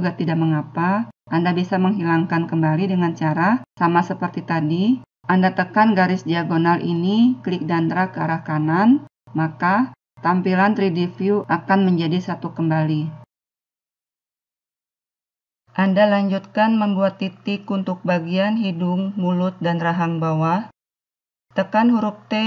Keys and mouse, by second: 7.4-8.6 drag, 21.4 t.